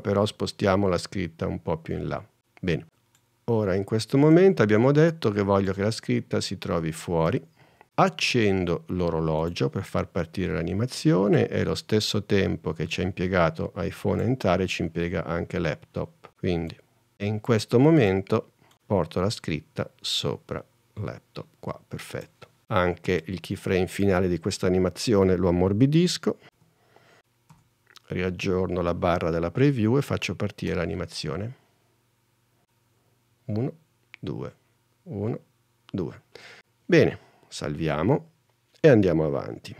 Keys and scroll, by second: 26.6 F9, 30.7 space, 37.9 super+s.